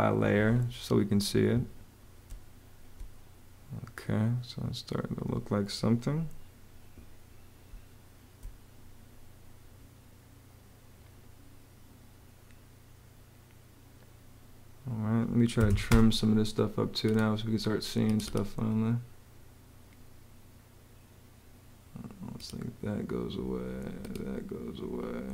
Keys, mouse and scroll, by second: 1.1 Escape, 2.0 space, 7.5 space, 15.1-16.0 typing.